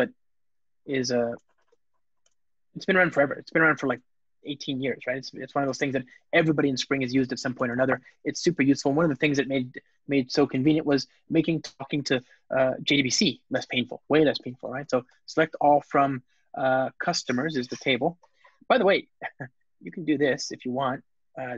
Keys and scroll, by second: 2.2 Return, 9.0 Return.